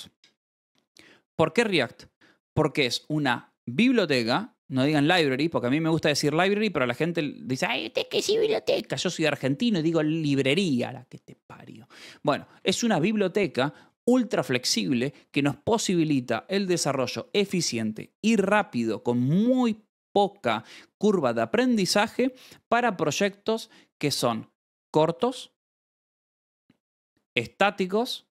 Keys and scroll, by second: 12.6 shift+v.